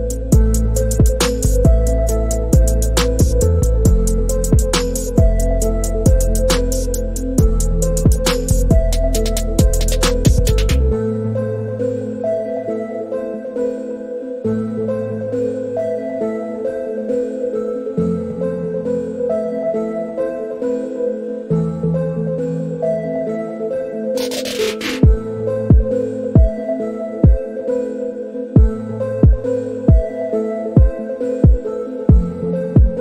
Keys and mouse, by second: 1.1 click, 2.1-8.4 drag, 10.2 click, 11.4-12.2 drag, 13.0-13.7 drag, 14.3-15.0 middle drag, 16.9 click, 18.1 click, 23.1 ctrl+z, 25.3 drag, 29.2 click, 31.8 click.